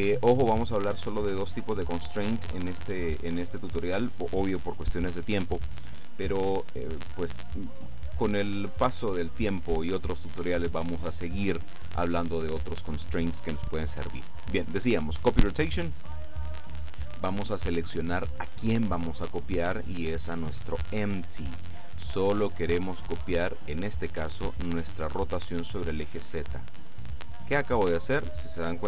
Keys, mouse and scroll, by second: 15.6 click, 18.3 click, 20.8 click, 23.2 click, 24.5 click, 27.8 right click.